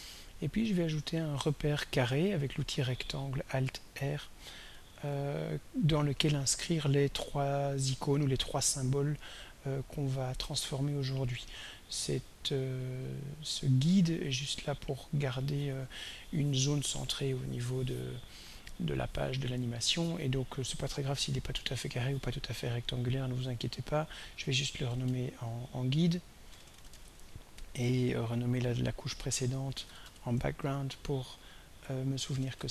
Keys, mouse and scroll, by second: 4.9 alt+r, 7.1-11.1 drag, 13.1 click, 23.7 click, 24.7-27.5 typing, 27.8 click, 28.3 click, 28.9 click, 29.6-30.6 typing, 31.8-32.7 typing.